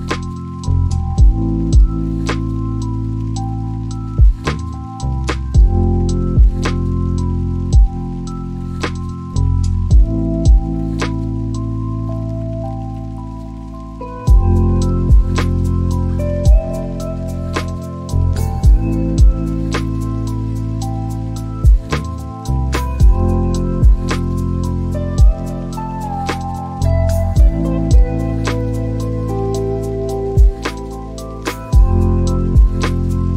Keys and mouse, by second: 6.5 shift+click, 7.7 click, 9.3 y, 15.4 click, 21.5 click, 22.5 g, 30.3 click, 33.0 click.